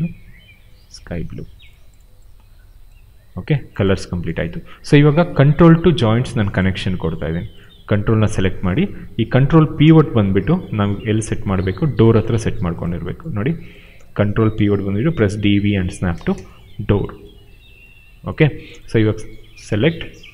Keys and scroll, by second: 9.3 space, 13.9 w, 14.8 d, 16.0 space, 19.2 q.